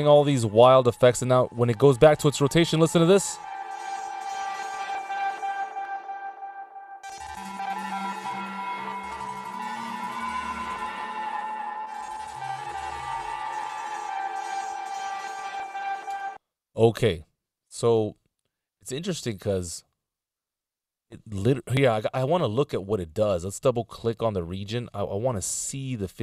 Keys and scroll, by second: 16.4 space.